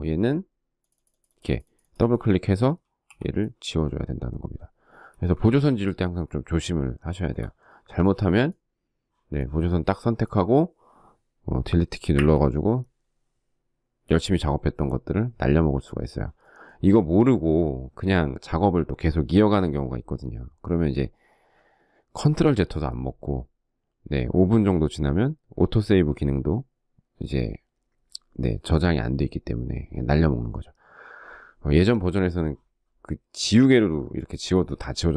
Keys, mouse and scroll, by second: 2.1 e, 4.2 space, 4.4 Escape, 6.2 shift+middle click, 11.2 Delete.